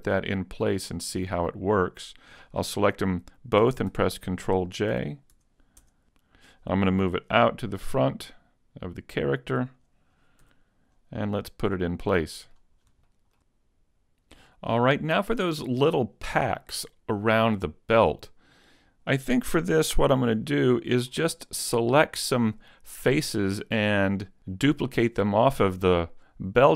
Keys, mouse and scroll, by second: 0.9 shift+right click, 3.9 ctrl+j, 4.9 a, 5.3 Tab, 5.7 right click, 5.8 Tab, 6.1 scroll down 2, 6.3 right click, 6.5 middle click, 8.1 click, 10.5 z, 11.0-11.3 scroll up 3, 11.3 middle click, 12.7 scroll up 1, 13.1 shift+middle click, 13.5 middle click, 18.1 right click, 20.0 KP_Decimal, 20.8 middle click, 21.4 shift+middle click, 22.0 middle click.